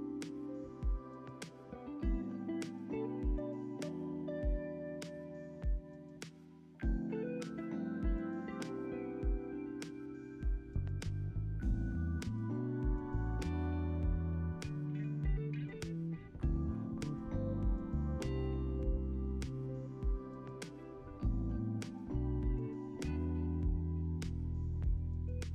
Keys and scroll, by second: 0.3 alt+z, 0.8 ctrl+v, 2.6 ctrl+c, 2.8 ctrl+v, 4.8 ctrl+c, 5.0 ctrl+v, 6.6 x, 8.7 z, 9.6 ctrl+v, 10.2 ctrl+s, 12.2 ctrl+c, 15.3 ctrl+v, 16.8 ctrl+s, 20.8 n, 21.7 Home, 23.6 ctrl+a.